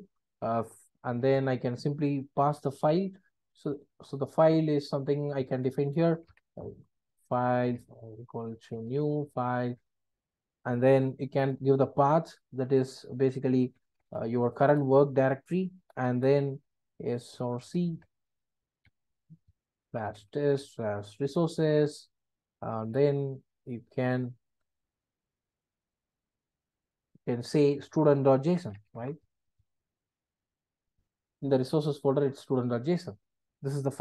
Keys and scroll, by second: 1.4 Return, 10.0 Return.